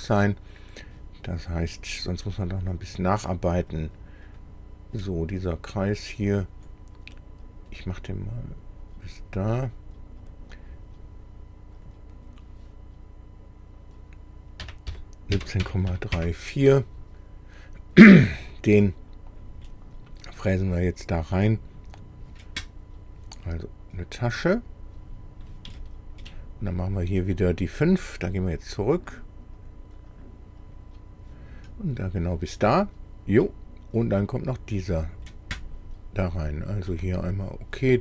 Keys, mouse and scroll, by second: 0.8 click, 2.4 click, 3.8 click, 4.3 click, 5.0-6.8 drag, 7.5-9.3 drag, 10.3 click, 11.8 click, 14.7-15.9 typing, 16.2 KP_Enter, 17.7 click, 18.8 middle click, 19.7-21.6 middle drag, 24.2 click, 25.4-25.7 scroll down 1, 25.8 shift+middle click, 25.8 shift+click, 29.1 click, 29.6 click, 30.1 click, 30.6 click, 31.6-32.1 scroll up 1, 32.6-34.2 middle drag, 37.0 click.